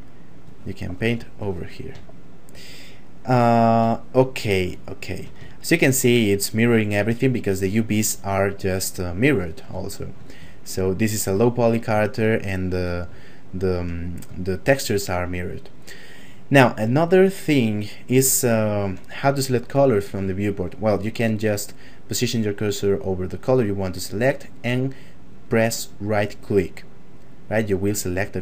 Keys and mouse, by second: 2.2 shift+middle click, 4.0 shift+middle click, 4.9 shift+middle click, 5.5 ctrl+middle click, 9.9 shift+middle click, 10.5 ctrl+middle click, 11.6 middle click, 12.2 shift+middle click, 13.2 shift+middle click, 14.5 shift+middle click, 18.5 shift+middle click, 19.4 ctrl+middle click, 26.8 right click.